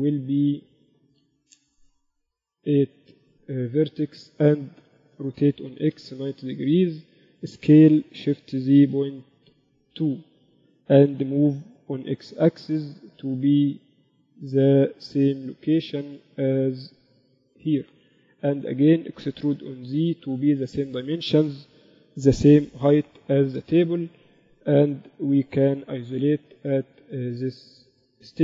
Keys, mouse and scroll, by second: 5.6 r, 8.1 s, 12.5 g, 15.9 click, 18.9 Tab, 19.2 a, 19.3 a, 20.1 e, 25.5 KP_Divide, 25.7 KP_7, 26.1 z.